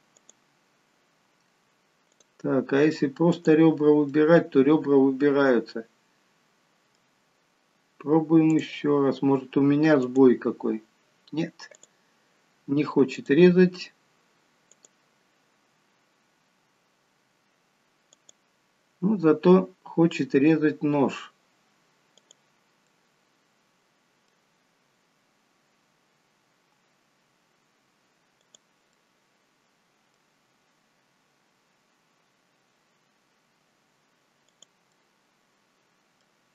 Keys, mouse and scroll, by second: 0.2 click, 2.1 click, 3.5 click, 4.1 middle click, 8.5 click, 10.1 click, 13.2 click, 14.7 click, 18.2 click, 22.9 middle click, 29.0 middle click, 35.0 middle click.